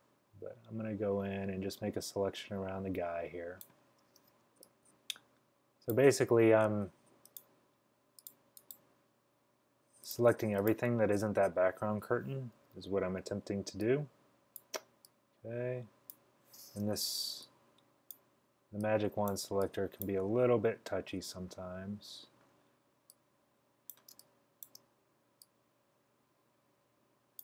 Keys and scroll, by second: 12.6-13.3 typing, 24.2 space, 24.7 space.